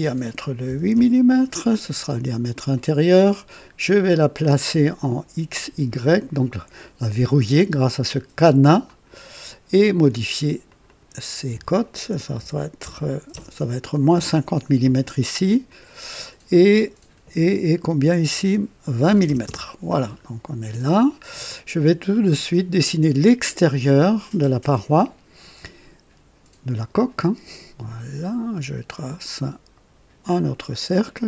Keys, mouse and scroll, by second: 0.6 KP_8, 0.9 KP_Enter, 2.2 scroll up 2, 2.7 right click, 5.9 click, 8.8 click, 10.6 click, 12.3 KP_Subtract, 12.7 KP_5, 13.2 KP_0, 14.1 Return, 15.6 click, 19.0-19.6 typing, 19.4 KP_Enter, 20.4-20.8 scroll down 1, 21.4 right click, 22.1 scroll up 1, 22.7-23.5 right drag, 26.7 click, 28.7 click, 30.2 click, 31.1 right click.